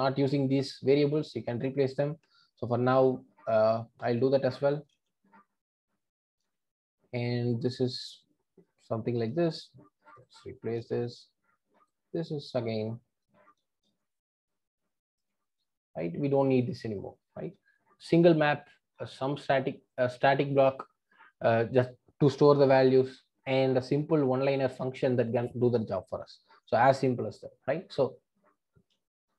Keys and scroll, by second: 4.9 super+x, 6.6 super+v, 9.3 super+x, 12.7 super+v, 13.8 super+x, 15.1 super+x, 17.1 super+v.